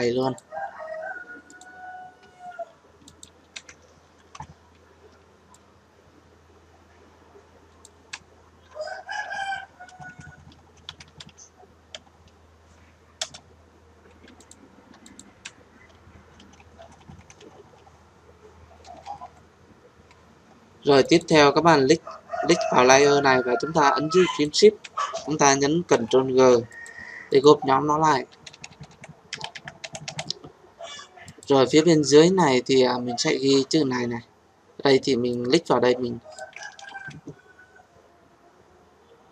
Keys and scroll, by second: 4.1 ctrl+t, 13.2 Return, 25.8 ctrl+g, 36.8 ctrl+z.